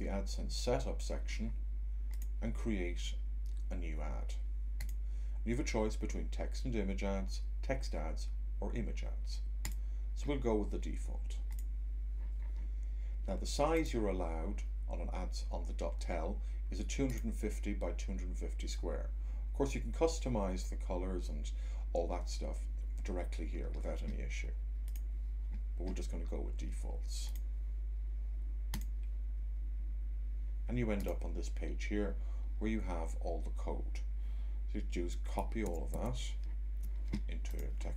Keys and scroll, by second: 35.6 c, 35.8 Tab.